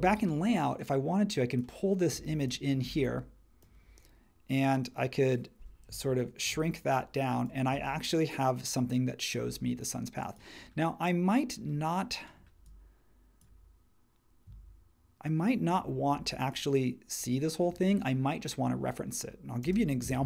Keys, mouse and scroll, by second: 19.6 space.